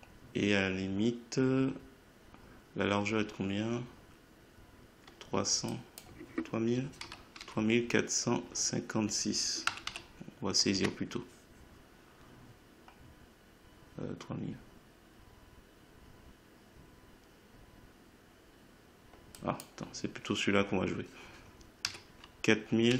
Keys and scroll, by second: 7.0 3, 9.6 5, 10.7 Tab, 21.8 4.